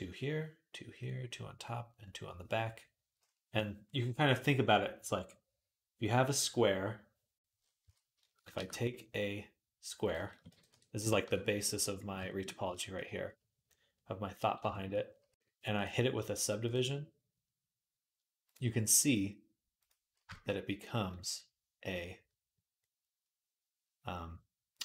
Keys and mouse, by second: 7.7 Tab, 8.3 shift+a, 10.3 g, 15.6-24.8 drag.